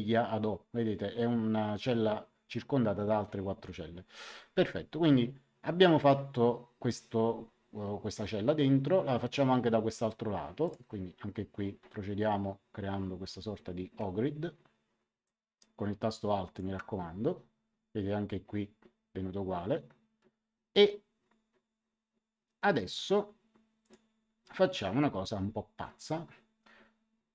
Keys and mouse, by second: 10.6 click, 15.2 click, 23.8 click.